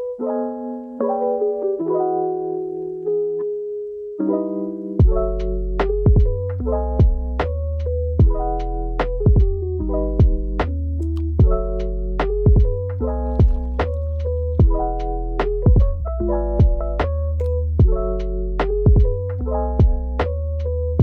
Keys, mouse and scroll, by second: 0.1 click, 0.2 click, 0.6 Left, 0.7 scroll up 7, 0.8 click, 0.9 middle click, 1.1 scroll down 4, 1.4 alt+shift+click, 1.7 middle click, 2.4 alt+shift+click, 2.6 scroll up 2, 2.7 Tab, 2.7 middle click, 3.1 Tab, 3.2 click, 3.3 middle click, 3.4 ctrl+z, 3.5 Tab, 3.7-4.1 scroll up 3, 4.1 click, 4.5 scroll up 2, 4.8 scroll down 6, 5.1-5.5 typing, 5.4 middle click, 5.7 click, 5.8 click, 5.9 middle click, 6.0 click, 6.1 ctrl+b, 6.3 middle click, 6.5 ctrl+b, 7.0 middle click, 7.2-12.7 typing, 7.2 middle click, 7.3 scroll up 5, 7.5 click, 8.0 middle click, 8.1 click, 8.3 scroll up 4, 8.6 middle click, 9.1 click, 9.4 scroll down 2, 9.8 click, 9.8 middle click, 10.4 click, 10.5 middle click, 10.8 right click, 10.9 click, 11.0 middle click, 11.3 middle click, 11.7 middle click, 12.0 middle click, 12.3 scroll down 6, 12.6 click, 13.2 scroll up 3, 13.3 click, 13.8 middle click, 14.3 0, 14.5 click, 14.7 0, 14.9 scroll down 15, 15.1 click, 15.3 click, 15.4 scroll up 8, 15.5 shift+middle click, 16.0 shift+a, 16.1 g, 16.2 middle click, 16.4 shift+click, 17.0 click, 17.1 scroll down 4, 17.2 scroll up 4, 17.4 click, 17.5 middle click, 17.8 click, 17.9 scroll down 2, 18.0 g, 18.1 click, 18.6 shift+middle click, 18.8 scroll down 1, 19.0 scroll up 4, 19.0 scroll down 1, 19.2 alt+shift+click, 19.2 alt+shift+click, 19.3 ctrl+z, 19.4 middle click, 19.8 alt+shift+click, 20.0 middle click, 20.3 alt+shift+click, 20.3 middle click, 20.4 scroll down 5, 20.5 shift+middle click, 20.8 u, 20.9 scroll up 2.